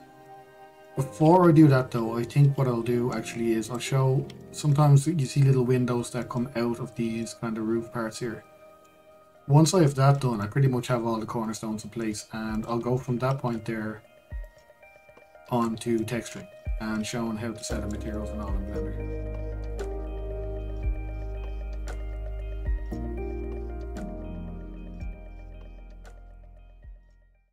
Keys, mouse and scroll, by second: 0.3-1.1 middle drag, 1.1-1.5 scroll up 2, 1.5-4.3 middle drag, 4.3 click, 4.7-5.1 scroll up 2, 5.1-9.7 shift+middle drag, 9.7 scroll, 10.0-13.2 middle drag, 13.2 click, 13.6 shift+click, 15.1 click, 16.6-17.2 middle drag, 17.2 scroll, 17.4-19.3 shift+middle drag, 19.3 scroll, 20.1-27.5 shift+middle drag.